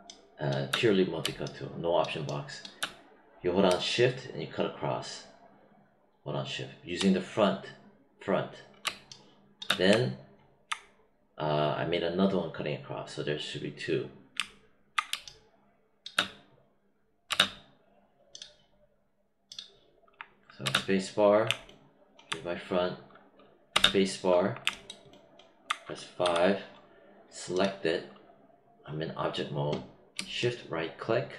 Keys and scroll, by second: 8.8 space, 15.0 space, 20.6 space, 23.7 space.